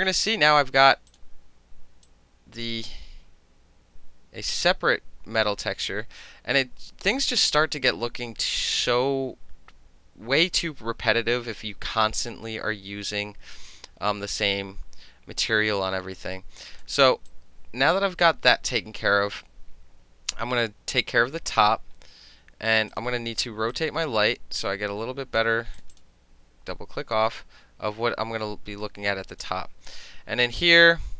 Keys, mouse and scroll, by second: 1.1 click, 2.1 click, 14.1-16.9 drag, 16.9 middle click, 17.3-20.7 drag, 20.7-22.7 middle drag, 23.0 click, 23.8-25.4 drag, 25.8 click, 26.0 click, 29.5 click.